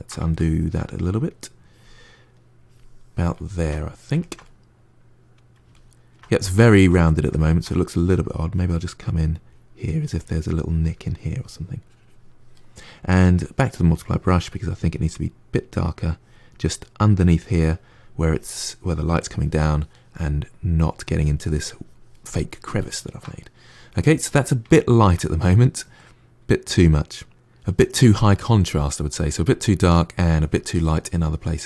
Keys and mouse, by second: 0.2-1.4 ctrl+middle drag, 1.4-3.2 drag, 3.2-8.3 ctrl+middle drag, 8.3-14.4 drag, 14.4-15.8 middle drag, 15.8-22.7 drag, 22.7-27.3 ctrl+middle drag, 27.8-31.6 ctrl+middle drag.